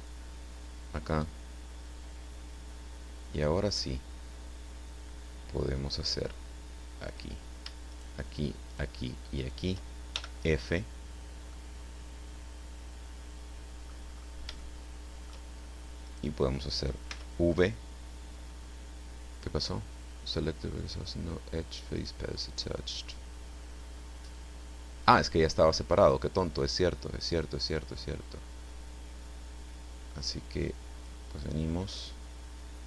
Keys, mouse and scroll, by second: 1.0 right click, 1.8-7.3 drag, 7.9 shift+right click, 8.6 shift+right click, 9.4 shift+right click, 10.1 shift+f, 11.5-14.0 right drag, 14.0-14.6 scroll up 3, 14.6 shift+middle click, 16.0 middle click, 17.1 v, 23.0-23.5 scroll up 2, 24.3-31.2 drag.